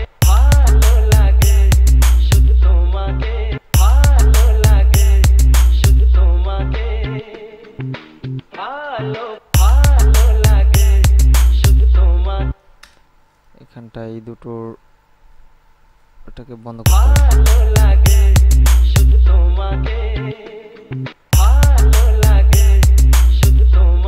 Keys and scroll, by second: 0.3 space, 3.8 space, 9.6 space, 12.8 space, 17.0 space, 21.3 space.